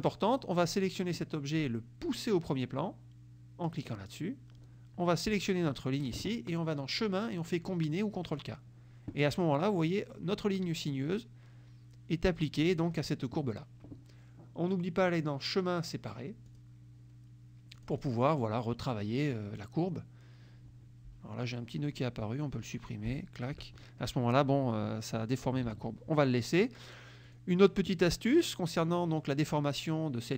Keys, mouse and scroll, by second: 0.1 click, 3.9 click, 5.8 shift+click, 7.1 click, 8.4 click, 15.2 click, 16.6 click, 17.9 click, 18.9 click, 22.0 click, 23.2 Delete, 25.8 ctrl+z, 27.4 click, 28.7 middle click.